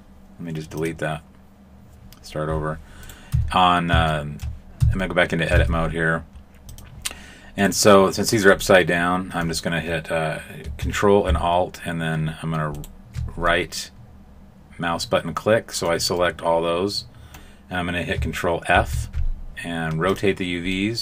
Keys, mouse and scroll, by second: 2.6-3.0 scroll up 2, 3.0 right click, 3.3 Tab, 4.1 shift+middle click, 4.7 Tab, 5.5 ctrl+Tab, 7.5 right click, 8.5 middle click, 12.7 ctrl+alt+right click, 13.4 middle click, 16.2 middle click, 20.7 middle click.